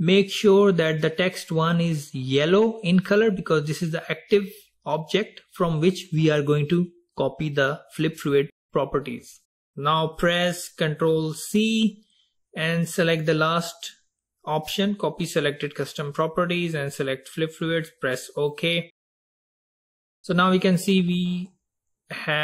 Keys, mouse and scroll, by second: 11.2 ctrl+c, 19.6 click, 20.9 click.